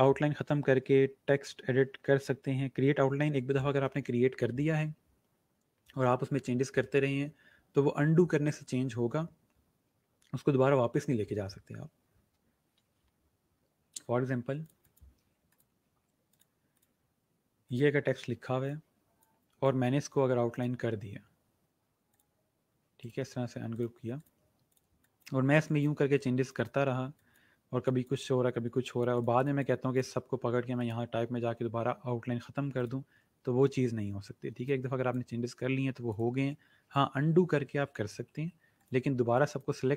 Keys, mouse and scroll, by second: 15.1 click, 23.0 right click, 23.7 click, 29.3 click, 32.7 click, 34.6 click, 37.1 ctrl+z, 38.7 click.